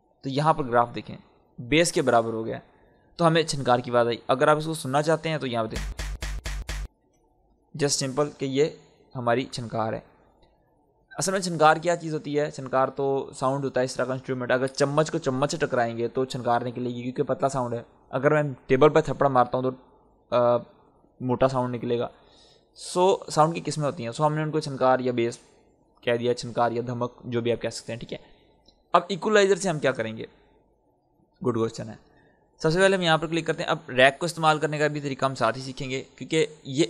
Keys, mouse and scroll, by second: 5.6 space, 8.0 click, 10.1-10.5 scroll down 1, 22.9-27.8 scroll down 1, 28.0-30.2 scroll up 1, 32.8 click.